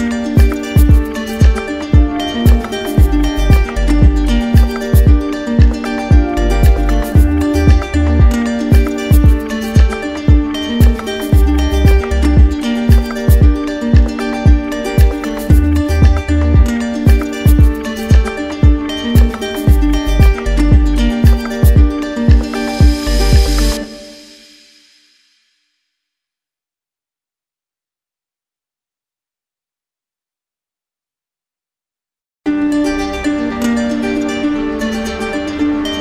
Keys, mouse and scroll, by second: 3.8 alt+click, 5.0 alt+click, 8.6 right click, 9.4 ctrl+z, 17.0 alt+click, 18.3 right click, 20.0 right click, 21.3 alt+click, 22.3 ctrl+z, 23.9 alt+click, 28.0 alt+click, 28.5 ctrl+z, 31.3 alt+click, 31.8 ctrl+z, 33.8 alt+click, 34.5 ctrl+z.